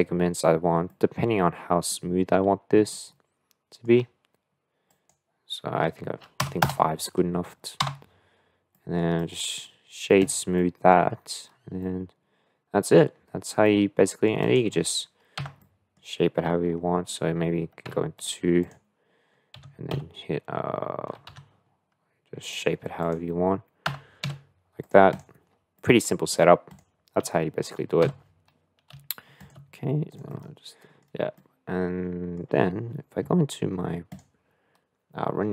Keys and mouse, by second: 0.9-1.9 middle drag, 2.9 shift+middle click, 4.8-7.2 drag, 7.7 Tab, 8.7 middle click, 9.1-10.2 right drag, 10.5 middle click, 11.8-12.9 middle drag, 13.7 middle click, 14.4 click, 15.4 Tab, 15.6 middle click, 17.8 2, 19.5 g, 22.9 click, 23.9 Tab, 24.2 s, 25.1 click, 25.7-26.3 middle drag, 26.6 click, 28.0 x, 28.9 x, 29.5 x, 29.6 x, 30.1 click, 30.4 middle click, 31.4-32.4 middle drag, 34.3 click.